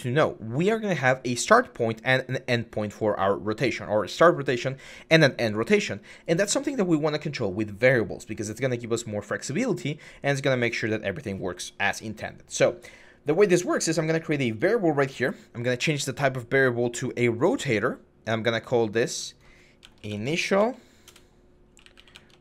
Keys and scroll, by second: 19.8-22.4 typing.